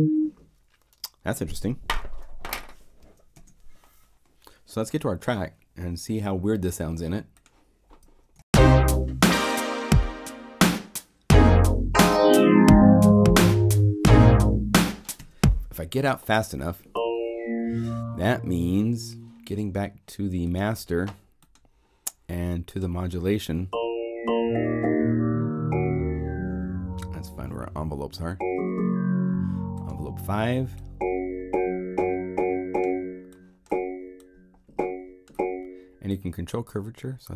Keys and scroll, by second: 3.0 0, 3.3 Return, 8.0 0, 8.3 Return, 15.1 0.